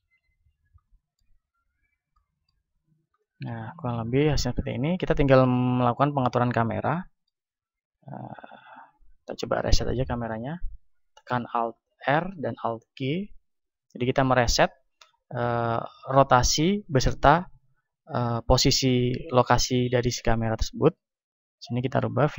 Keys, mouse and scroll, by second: 0.2 KP_1, 1.3-6.3 middle drag, 6.3-7.8 drag, 7.8-12.2 right drag, 12.2 alt+r, 12.9 alt+g, 20.3-22.3 drag.